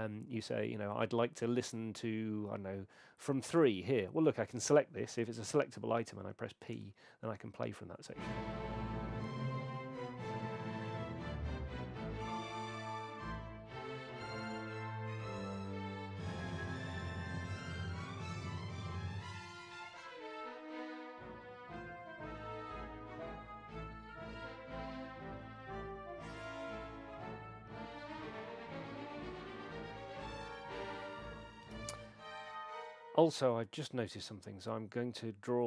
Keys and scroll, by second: 6.7 p, 31.6 space.